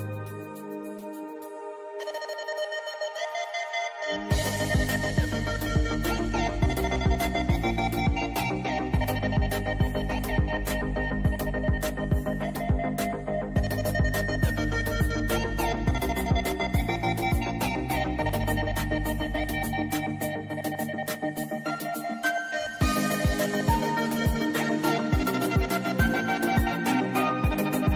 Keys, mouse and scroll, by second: 1.0 ctrl+d, 2.2-9.5 drag, 9.5 right click, 10.5 click, 12.9 space, 13.0 click, 13.2 space, 13.8-17.1 drag, 17.5 right click, 21.3 click, 22.7 right click, 24.8 click, 25.1 right click, 25.9 click.